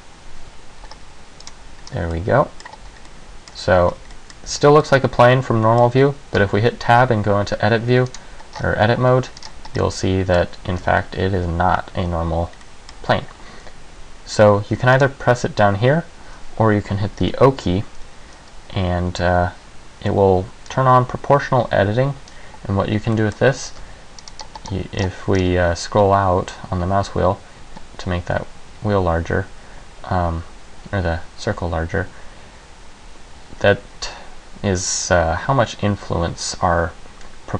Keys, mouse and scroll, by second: 1.6 click, 2.0 scroll down 1, 2.3 middle click, 2.9 Tab, 3.2 middle click, 3.7 Tab, 4.0 Tab, 4.3 middle click, 4.6 z, 4.9 middle click, 6.5 Tab, 8.2 right click, 8.7 scroll up 5, 9.5-10.1 scroll down 3, 9.9 middle click, 10.8 g, 12.7 middle click, 15.1 click, 17.5 o, 23.3 middle click, 23.8 g.